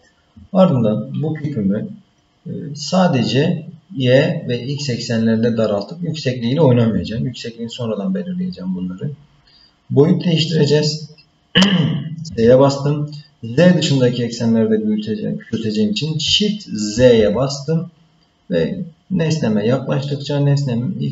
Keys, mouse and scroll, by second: 12.3 s.